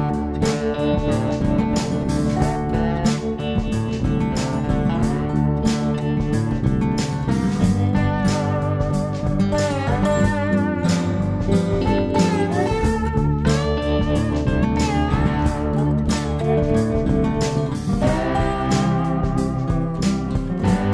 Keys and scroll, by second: 2.6-3.8 typing, 10.9-12.0 typing, 20.8 Page_Down.